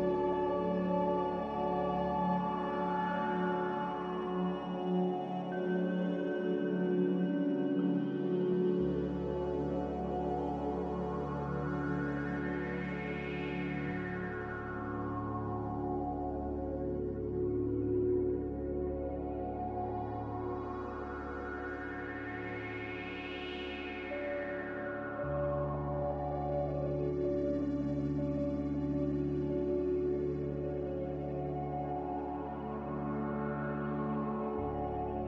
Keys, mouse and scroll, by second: 9.2 z, 12.0 ctrl+c, 12.6 ctrl+v, 27.5 b, 28.7 Delete, 30.9 Delete, 32.2 Delete, 34.7 n.